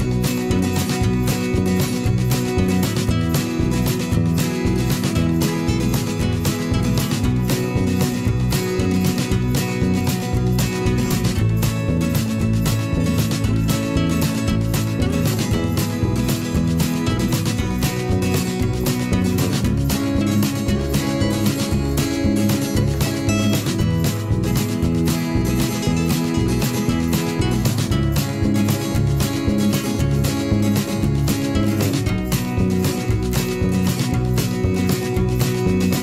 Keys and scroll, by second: 1.7 ctrl+z, 2.2 v, 11.1 b, 18.6 ctrl+z, 23.1 ctrl+z, 23.2 ctrl+z, 31.0 v, 32.8 b.